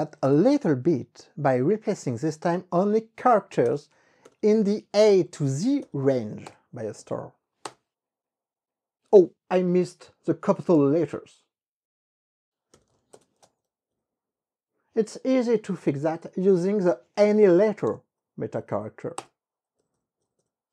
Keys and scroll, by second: 0.1 q, 0.3 Return, 1.0 Up, 1.3 Up, 1.7 Left, 3.7 BackSpace, 4.3 alt+(, 4.9-5.8 typing, 5.9 alt+), 6.6 KP_Enter, 7.1 Up, 7.8 KP_Enter, 12.7-13.6 typing, 13.7 Up, 14.1 Up, 14.4 Left, 15.4 BackSpace, 18.0 w, 19.3 Return, 20.3 Up.